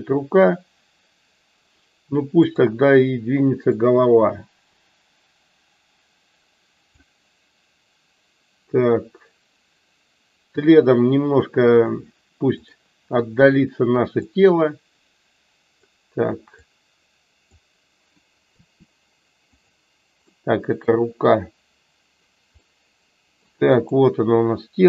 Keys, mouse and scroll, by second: 2.3 click, 3.9-6.9 drag, 12.5 click, 14.4-15.6 drag, 16.5-17.5 drag.